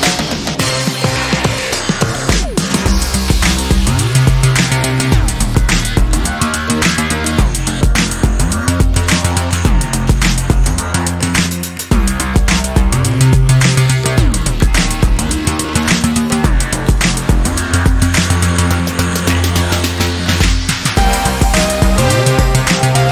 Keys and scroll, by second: 2.4 [, 2.5-3.6 [, 4.2 [, 5.1 [, 6.2 [, 6.3 [, 8.3 ctrl+t, 18.5 Return, 20.5 ctrl+j, 21.9 ctrl+t.